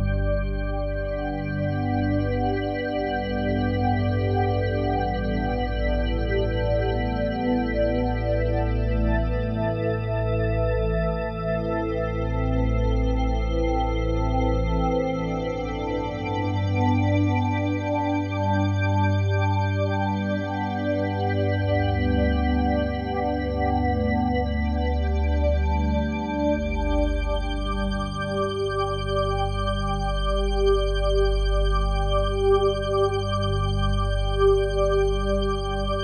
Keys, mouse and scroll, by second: 1.0 r, 1.2 y, 2.7 click, 3.4 g, 5.9 Escape, 9.5 r, 11.1 click, 11.8-12.3 typing, 15.6 click, 16.8 alt+shift+click, 20.6 typing, 22.4 shift+click, 23.1 typing, 24.2 shift+click, 26.6 alt+shift+click, 29.0-29.5 typing, 33.0 typing, 35.1 click.